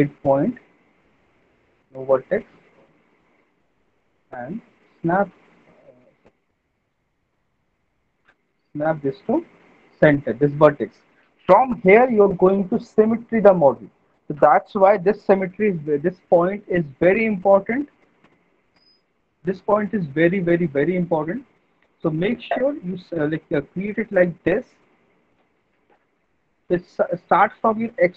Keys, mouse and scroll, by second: 2.6 click, 5.7 click, 7.1 ctrl+z, 10.0 click, 17.5 middle click, 18.8 alt+middle click, 19.2 alt+middle click, 22.3 alt+middle click, 26.6 middle click.